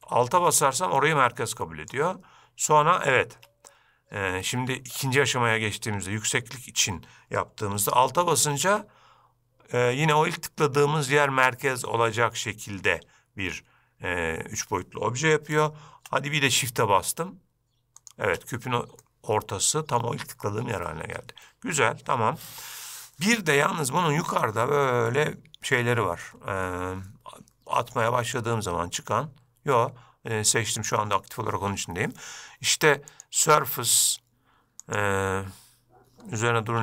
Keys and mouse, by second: 19.2-20.1 middle drag, 28.5-31.0 drag, 33.2-34.5 drag, 35.0-36.2 drag.